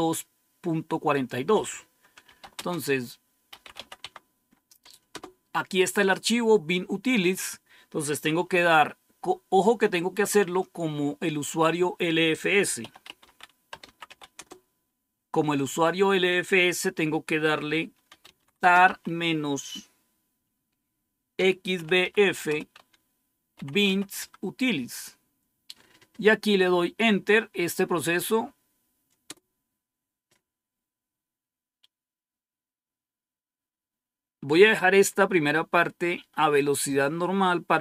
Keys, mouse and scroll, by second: 1.0 click, 1.9-5.0 typing, 12.4-14.4 typing, 17.7-19.3 typing, 21.0-24.3 typing, 29.2 Return.